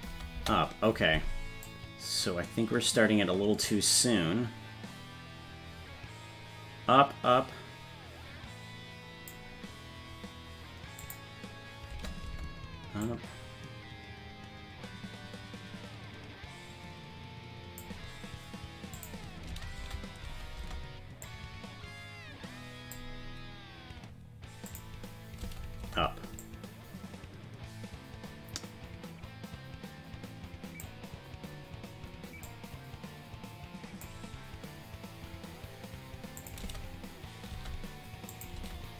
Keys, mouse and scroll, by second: 0.1 space, 0.4 space, 1.7-9.4 drag, 11.0 click, 11.9 space, 12.3 space, 13.1-17.9 drag, 19.0 click, 19.5 space, 19.8 space, 20.3 space, 20.6 space, 21.3-23.0 drag, 24.7 click, 25.4 space, 25.8 space, 26.4-30.9 drag, 32.5-34.1 drag, 36.4 click, 36.6 space, 37.6 space, 38.3 click, 38.6 space.